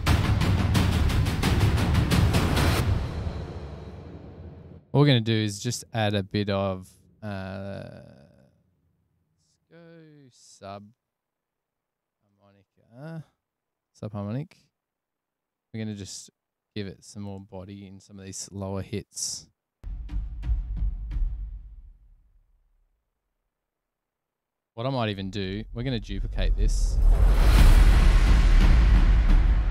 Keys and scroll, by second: 10.1-11.0 typing, 11.4 Page_Down, 12.1 Page_Up, 12.4 Return, 13.9 space, 18.1 super+=, 20.9 super+=, 29.5 Return.